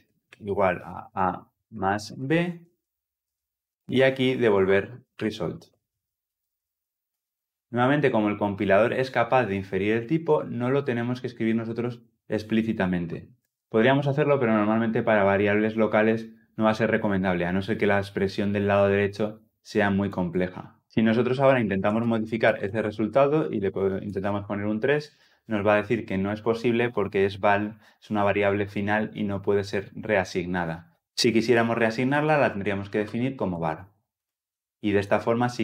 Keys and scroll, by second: 3.1 Escape, 6.9 Return, 22.3 Return.